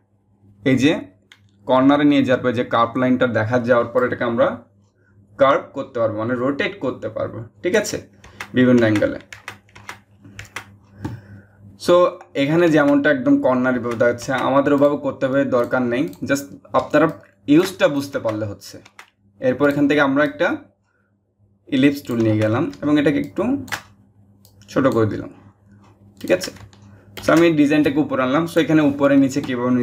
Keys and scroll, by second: 26.7 ctrl+shift+j.